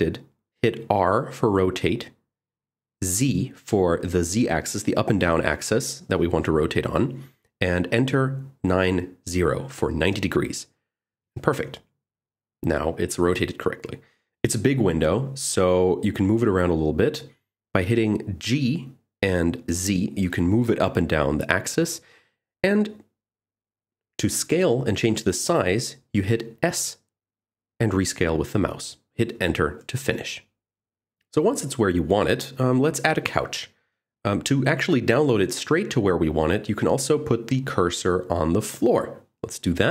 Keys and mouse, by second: 1.1 r, 4.9 z, 7.7 9, 8.0 0, 11.1 Return, 18.9 g, 19.7 z, 27.2 s, 30.6 g, 30.6 x, 31.1 y, 31.4 z, 31.6 click, 31.9 ctrl+z, 33.9 Tab, 34.3 middle click, 35.6 click, 37.2 shift+s, 39.2 Tab.